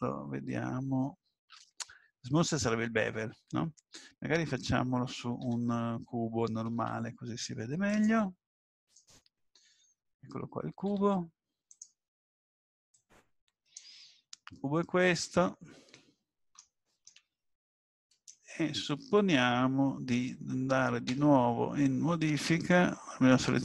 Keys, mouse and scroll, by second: 5.4 Tab, 6.7 shift+a, 10.9 g, 12.9 click, 14.7-15.0 scroll up 2, 15.9 shift+middle click, 17.0 shift+middle click, 17.5 middle click, 21.1 Tab.